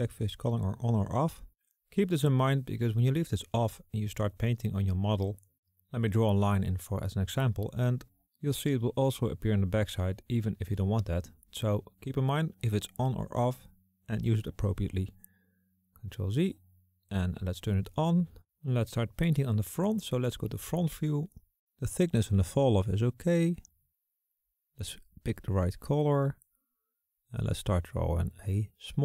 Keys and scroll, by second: 12.6 s, 12.8 ctrl+z, 19.8 KP_1, 24.7 s.